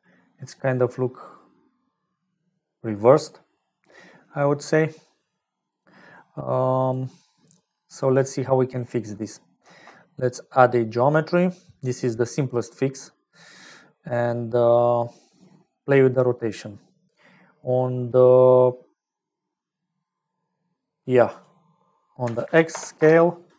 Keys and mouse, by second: 4.2 click, 5.6-6.9 drag, 7.5 click, 8.5 middle click, 9.6 shift+a, 14.0 middle click, 14.5 click, 15.4 click, 19.2-21.0 drag, 21.2-23.5 drag.